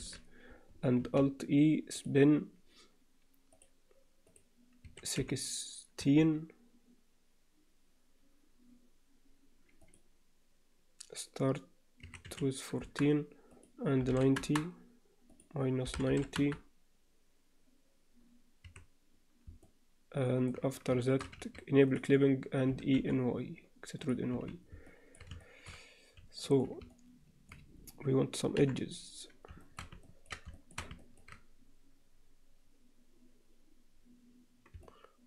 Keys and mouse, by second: 0.0 n, 1.0 alt+e, 3.5 click, 4.3-9.8 drag, 9.9-13.1 drag, 13.7-18.7 drag, 18.7 1, 19.6-20.5 middle drag, 21.0 shift+middle click, 21.9 click, 22.7 e, 24.3 z, 24.9 alt+middle click, 25.4 shift+middle click, 26.4 shift+middle click, 26.9 middle click, 28.6 KP_7, 29.6 shift+middle click, 30.1 ctrl+alt+middle click, 30.5 shift+middle click, 31.0 ctrl+middle click, 34.8 alt+middle click.